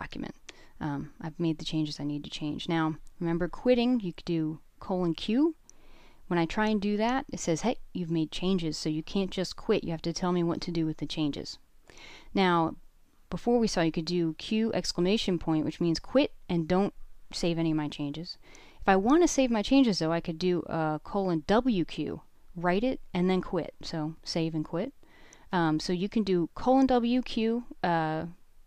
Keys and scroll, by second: 1.7-2.0 typing, 4.8 Return, 11.0-12.7 typing, 15.2 BackSpace, 15.4 BackSpace, 17.2 w, 17.4 q, 25.6 BackSpace, 25.8 BackSpace, 26.0 BackSpace, 28.3 shift+z, 28.5 shift+z.